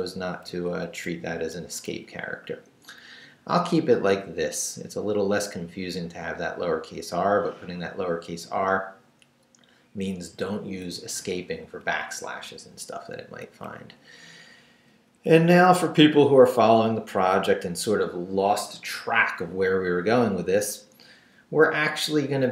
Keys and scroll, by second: 1.0 Left, 1.9 Down, 4.8 Left, 10.8 Down, 12.4 Down, 13.4 Up, 14.9 Down, 16.7 Down.